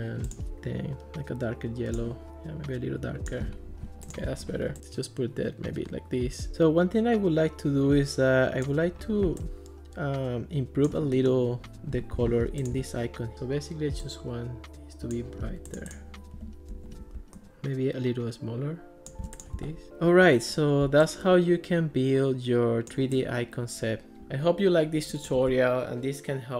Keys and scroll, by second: 16.7 alt+r.